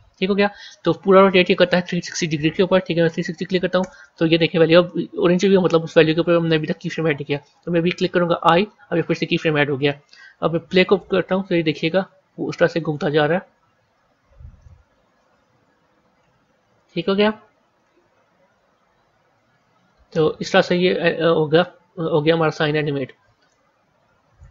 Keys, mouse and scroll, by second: 1.4-4.6 drag, 10.8-13.8 drag, 20.5-24.5 drag.